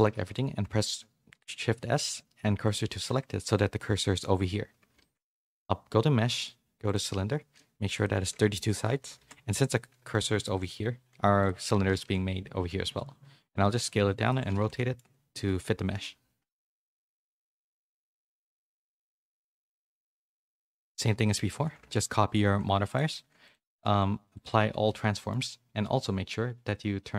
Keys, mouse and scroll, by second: 0.3 shift+s, 3.1 Tab, 3.4 middle click, 4.9 shift+a, 7.9-9.2 drag, 11.9 r, 14.7 middle click, 15.9 KP_3, 16.4 z, 16.9 s, 17.7 z, 18.0 middle click, 18.4 shift+middle click, 18.7 s, 19.5 g, 22.3 ctrl+l, 23.7 ctrl+a, 24.8 middle click.